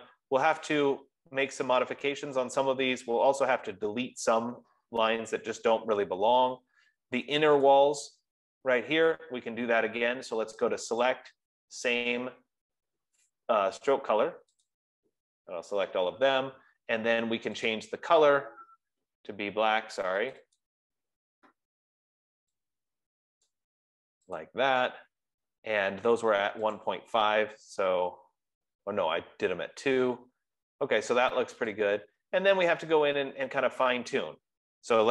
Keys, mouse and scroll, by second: 1.0 click, 8.3 click, 11.6 click, 15.4 click, 18.2 click, 20.9 click, 21.2 click, 24.0 click, 24.7 click, 27.2 click, 32.0 click.